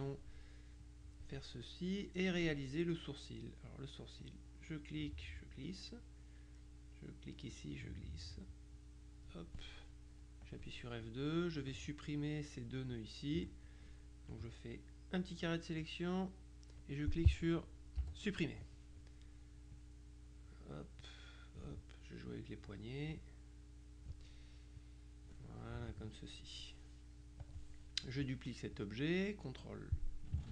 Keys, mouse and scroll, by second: 0.9 click, 2.0 middle click, 4.3-6.1 drag, 7.2-9.9 drag, 10.5 click, 11.7 click, 14.4 click, 18.1 Delete, 19.8 click, 22.4 click, 24.9 click, 25.7 middle click, 27.5 click.